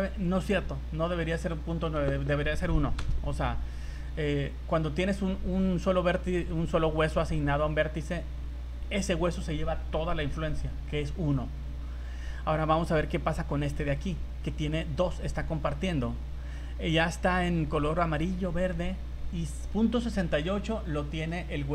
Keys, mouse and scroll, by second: 1.4 click, 6.1 scroll down 3, 12.1 scroll up 3, 13.8 right click, 16.0 scroll down 1, 16.7 scroll up 2, 21.2 scroll down 1.